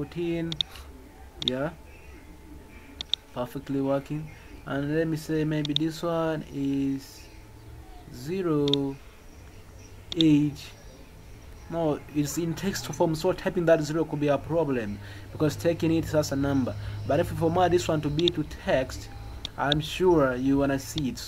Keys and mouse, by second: 0.5 click, 1.4 click, 3.0 click, 5.6 click, 8.7 click, 10.2-10.5 drag, 18.1 click.